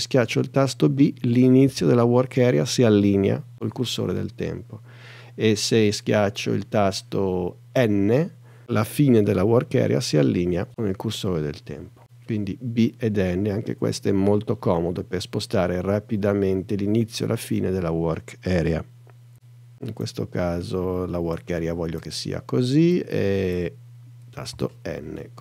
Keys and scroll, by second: 1.7 b, 8.3 n, 24.5 n.